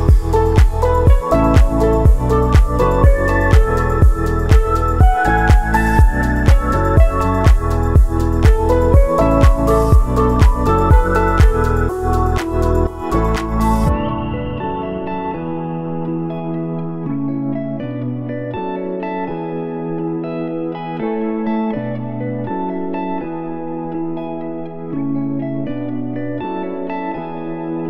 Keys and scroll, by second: 5.0 space, 16.0 space, 19.7 space, 21.6 ctrl+s.